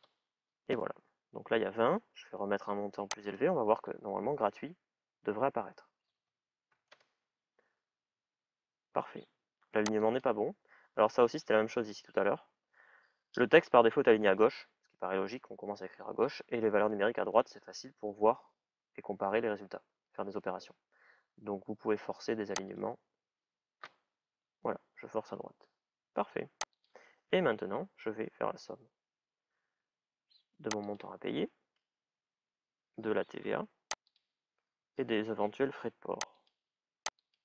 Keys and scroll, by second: 4.1 Return, 5.6-7.0 typing, 33.1 shift+=, 34.9 shift+=.